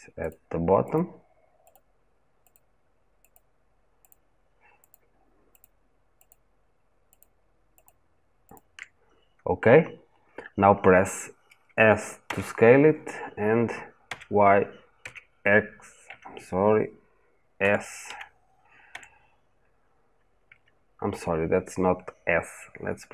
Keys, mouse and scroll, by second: 12.1 s, 15.9 Escape, 17.4 s.